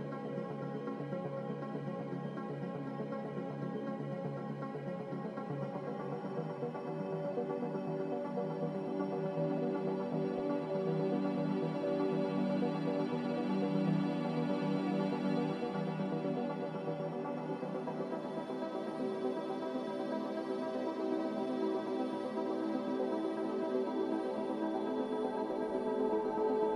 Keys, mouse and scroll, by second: 1.2 q, 8.1 a, 10.7 z, 11.0 z, 12.3-13.1 typing, 15.4 click, 18.2 click, 19.6-20.4 typing, 23.6 a, 25.1 q, 25.2 q.